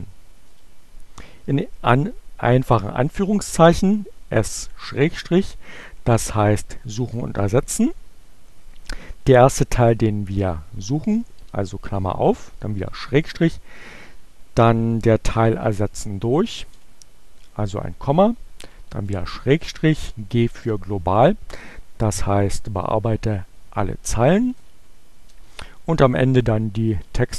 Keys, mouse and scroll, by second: 2.0 s, 4.4 shift+7, 9.9 shift+8, 12.3 shift+7, 16.9 ,, 17.5 shift+7, 19.9 g, 25.1 space, 27.2-27.3 typing.